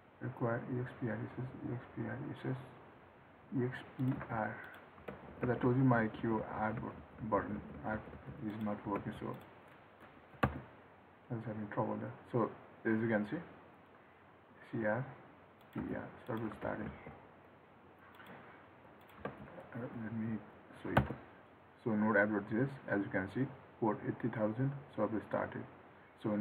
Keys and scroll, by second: 5.3 ctrl+s, 16.8 ctrl+s, 19.5 ctrl+c.